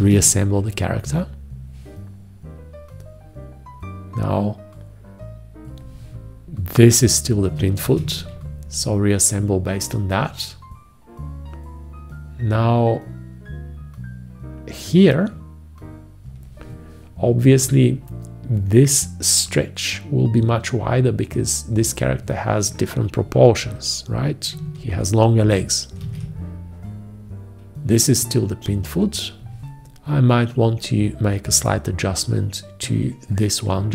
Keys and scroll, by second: 0.0 ctrl+`, 7.8 ctrl+`, 26.0 ctrl+`.